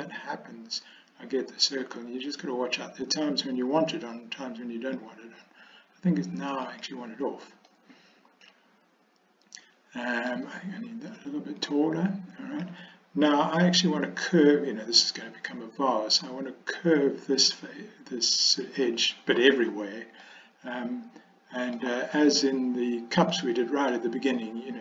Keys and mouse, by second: 6.8 click, 7.9-10.4 middle drag, 11.7-14.3 drag, 20.3-21.9 middle drag, 23.5 middle click.